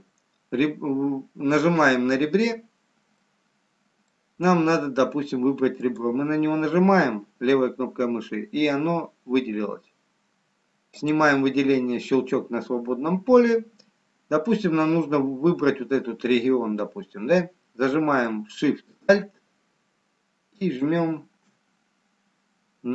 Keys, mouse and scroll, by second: 3.0-3.4 scroll up 3, 4.8 middle click, 5.8 click, 7.6-9.5 scroll up 2, 11.0 click, 11.0-12.7 scroll down 2, 20.6 alt+shift+click.